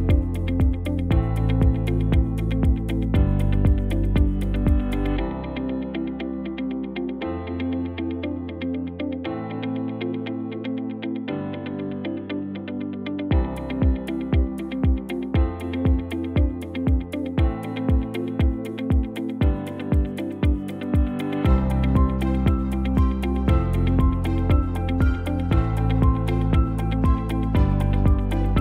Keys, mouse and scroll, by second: 25.9 BackSpace, 27.8 KP_0.